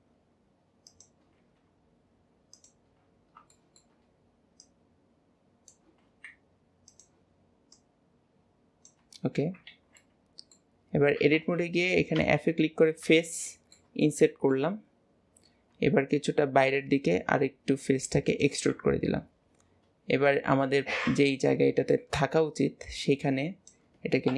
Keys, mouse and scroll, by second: 2.9 scroll up 1, 3.6-4.6 shift+middle drag, 4.6 click, 7.8 click, 9.3-9.7 scroll down 4, 9.7 alt+z, 11.2-13.3 middle drag, 13.5 middle click, 15.8-20.3 middle drag, 20.3 click.